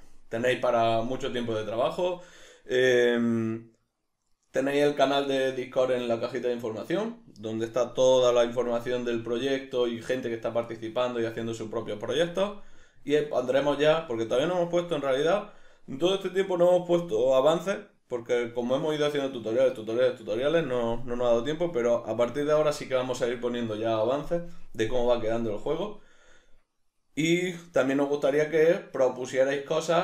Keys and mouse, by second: 20.8-24.1 middle drag.